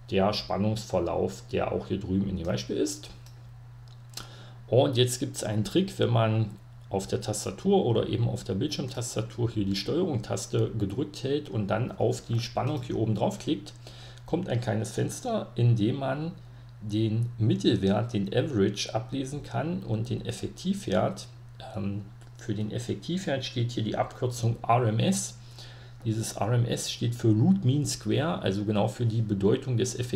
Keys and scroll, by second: 3.3-4.4 typing, 3.4 Print, 5.9 Caps_Lock.